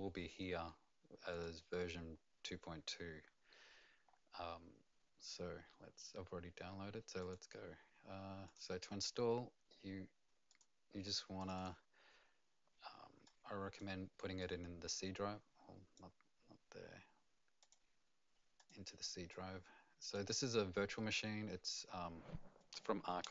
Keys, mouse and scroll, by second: 1.4 click, 4.1-5.5 scroll up 2, 7.3 click, 8.4 click, 11.4 click, 13.2 click, 14.4 click, 17.6 click, 18.5 click, 19.3 click.